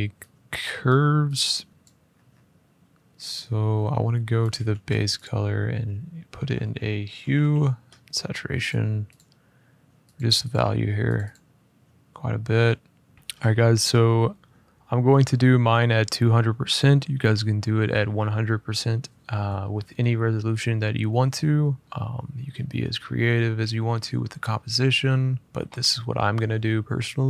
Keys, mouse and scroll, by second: 0.6 click, 1.1 click, 1.7 click, 2.8-3.8 scroll, 4.2 click, 4.4 a, 4.9 click, 6.9 typing, 8.5 click, 8.9 click, 9.9 click, 10.1 click, 10.2 click, 10.9 click, 11.0 click, 13.1-14.5 typing.